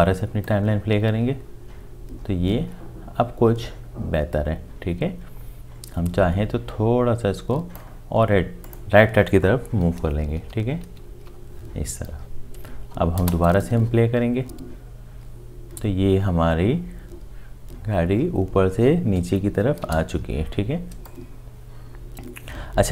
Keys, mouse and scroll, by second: 10.4 Right, 13.2 space, 19.8 space.